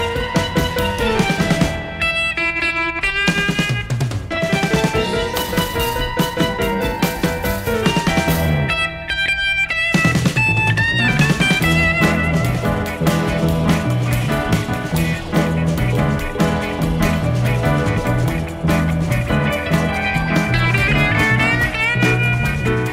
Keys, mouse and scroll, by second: 2.2 click, 4.1 click, 8.4 click, 9.8 click, 10.5 space, 11.5 KP_Subtract, 12.5 space, 13.7 space, 14.9 click, 16.0 click, 18.0 click, 19.5 click, 20.7 click, 21.1 space.